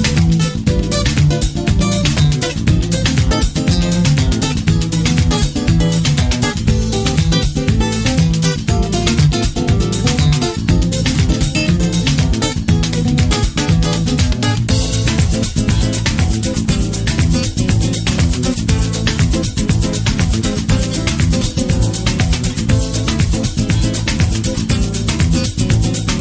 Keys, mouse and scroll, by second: 2.2 KP_8, 4.1-4.6 scroll down 2, 4.7 middle click, 5.8-26.2 middle drag, 8.2-9.5 scroll up 2, 9.5 shift+scroll down 1, 9.8 ctrl+scroll up 1.